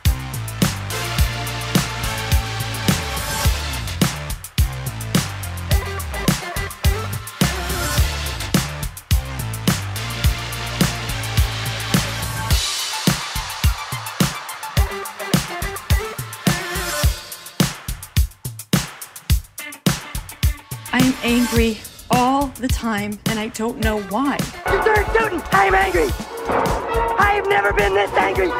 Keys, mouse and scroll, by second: 3.8 click, 5.5 click, 5.8-7.2 drag, 8.5-9.8 drag, 10.2-11.5 drag, 11.9 click, 13.0 Tab, 13.4 click, 13.8 middle click, 14.5 shift+click, 15.1 click, 16.6 middle click, 18.1 g, 18.6 z, 23.3 click, 23.7 click, 25.5 click, 26.1 g, 26.2 g, 26.8 click, 27.3 middle click.